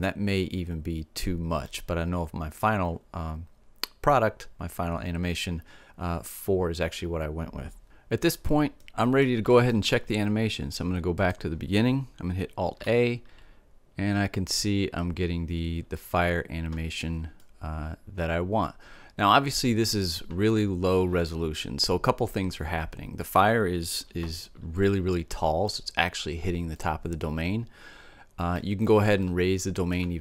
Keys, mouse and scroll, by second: 1.1-4.5 middle drag, 8.3-10.7 middle drag, 10.7-12.6 drag, 12.4 alt+a, 16.9-18.9 middle drag, 24.6-28.3 middle drag, 28.9-30.2 middle drag.